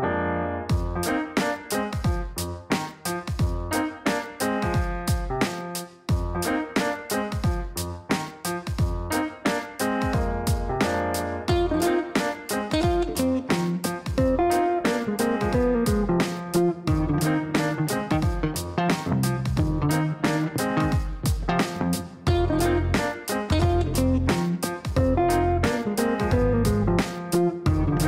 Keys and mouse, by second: 2.9 click, 3.9 click, 5.2-6.6 typing, 8.1 click, 8.7 click, 9.8-11.2 typing, 13.9 click, 14.6 click, 15.7 click, 17.5 click, 24.4 click, 26.8 click.